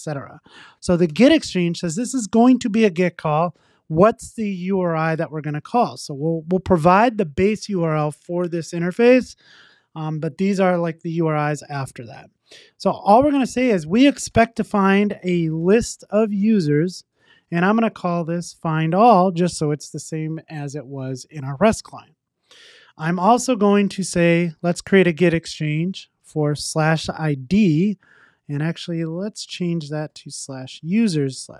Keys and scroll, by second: 1.1 Return, 4.8 Tab, 16.4 Return, 24.4 Return, 25.2 Tab.